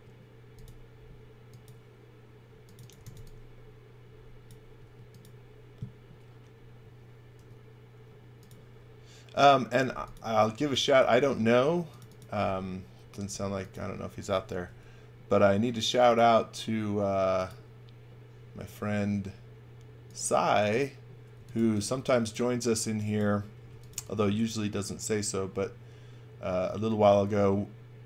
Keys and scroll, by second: 2.5-3.6 typing, 4.7 space, 7.3 r, 10.9 space, 14.6 r, 21.1-22.8 typing, 23.9 v.